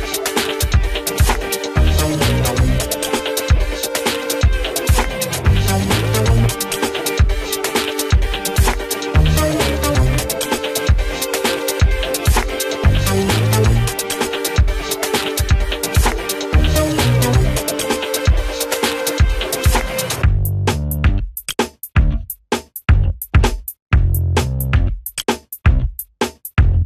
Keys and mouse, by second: 0.5 shift+click, 0.7 c, 1.7 click, 4.1 right click, 5.2 click, 6.3 ctrl+r, 6.7 F2, 6.9-9.6 drag, 9.6 ctrl+space, 10.0 click, 10.8 F3, 11.2 right click, 11.9 click, 12.1 ctrl+r, 12.3 click, 12.8 F2, 13.1 click, 15.4 click, 18.2 right click, 18.9 click, 19.1 ctrl+r, 19.3 ctrl+click, 19.5 F2, 19.8 click, 21.0 ctrl+z, 21.6 shift+Page_Down, 22.1 click, 22.5 Delete, 23.7 click.